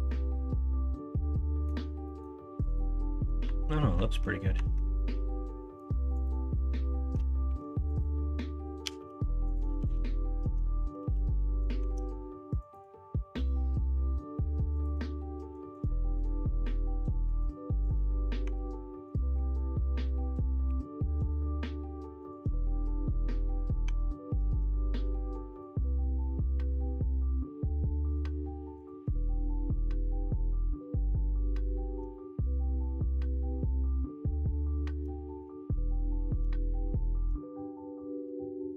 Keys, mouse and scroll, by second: 0.0-1.6 middle drag, 2.0 middle click, 3.1 middle click, 3.4 Tab, 4.1 Tab, 4.5 Tab, 4.9 middle click, 7.4 1, 8.8 g, 9.9 Tab, 10.3 middle click, 11.0 ctrl+z, 11.4 middle click, 11.9 Tab, 14.8-18.5 drag, 18.5 Tab, 18.9 middle click, 19.7 middle click, 20.8 3, 23.5 click, 24.0 Tab, 24.4 alt+z, 29.0 alt+z, 29.9 middle drag, 30.8-31.5 middle drag, 32.1-32.6 middle drag, 33.4 middle drag, 33.7-34.2 middle drag, 34.7 middle drag, 35.2 shift+middle drag, 36.1 middle drag, 36.6 shift+middle drag, 37.6 middle click.